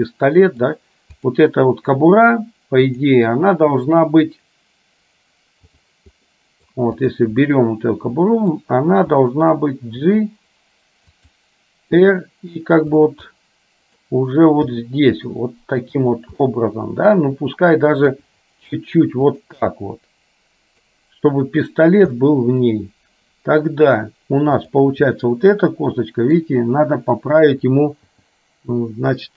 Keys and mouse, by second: 1.2 click, 3.1-6.1 drag, 6.3 middle click, 7.1 click, 7.6-8.6 middle drag, 9.2 middle click, 10.1 g, 12.1 r, 13.3 middle click, 14.9 g, 16.6 middle click, 18.2 r, 19.8-20.9 middle drag, 22.2 middle click, 24.7 click, 25.2-26.4 middle drag, 28.2 g.